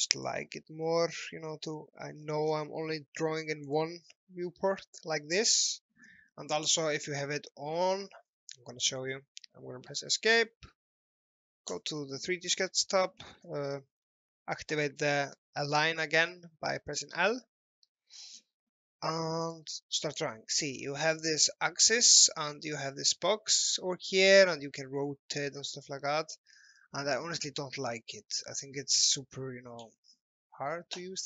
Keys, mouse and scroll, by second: 0.1 click, 2.2-2.5 scroll down 1, 3.7 click, 10.1 Escape, 11.7 click, 15.7 scroll up 1, 16.0 scroll down 1, 17.2 l, 18.2-18.7 scroll up 1, 18.7-19.5 scroll down 1, 19.5 click, 22.5 click, 28.1 ctrl+z, 28.9 z.